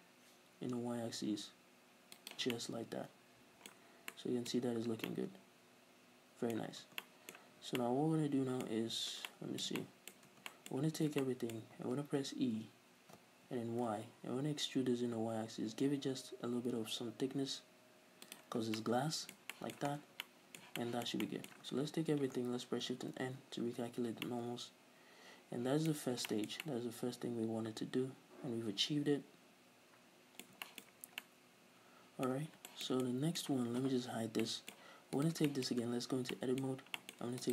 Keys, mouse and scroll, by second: 2.3 shift+click, 2.6-3.9 middle drag, 3.9 scroll down 2, 4.8 scroll up 1, 5.1 middle click, 5.9 middle click, 6.9 Tab, 7.2-7.6 middle drag, 7.6 scroll down 2, 7.8-12.4 middle drag, 8.7-9.3 scroll up 2, 10.4 Tab, 10.8 a, 12.4 e, 14.3-18.4 middle drag, 17.0-18.4 drag, 18.6 scroll down 1, 18.8-20.0 middle drag, 19.9 scroll down 1, 20.3-22.4 middle drag, 21.9 a, 23.2 shift+n, 24.3-26.0 middle drag, 26.0-26.3 scroll up 2, 26.3-28.4 shift+middle drag, 28.6-32.0 middle drag, 30.9 scroll up 1, 32.1-32.5 middle drag, 32.5 scroll down 2, 32.7-36.4 shift+middle drag, 35.3 right click, 35.9 Tab, 36.1-36.8 scroll up 3, 37.3 middle click, 37.4 alt+right click.